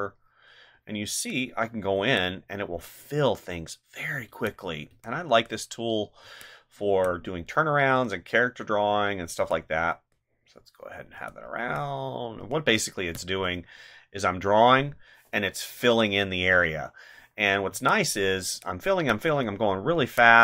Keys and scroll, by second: 0.7 ctrl+z, 2.0 space, 3.9 ctrl+z, 6.2 space, 9.3 space, 11.1 space, 12.4 space, 17.4 ctrl+z, 20.0 space.